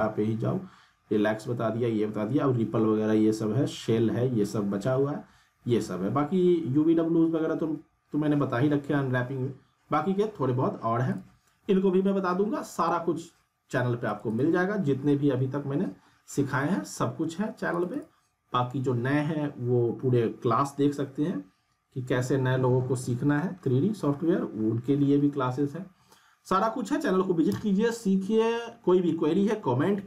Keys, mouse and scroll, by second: 5.1-5.6 scroll down 1, 11.1 click, 17.7 click.